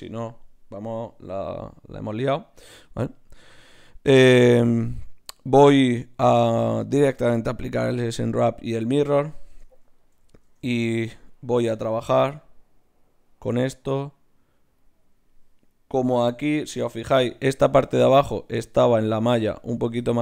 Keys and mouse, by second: 1.7-3.8 middle drag, 7.3-9.8 drag, 9.0 Tab, 9.4 right click, 10.4 ctrl+Tab, 16.3-18.4 drag, 17.7 z, 18.4-20.2 right drag, 19.7 z.